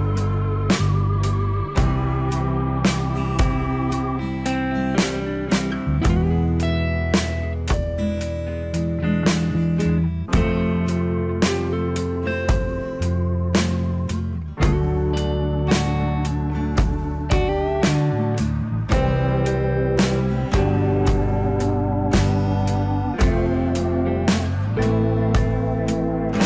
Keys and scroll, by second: 1.0 F3, 16.4 alt+w.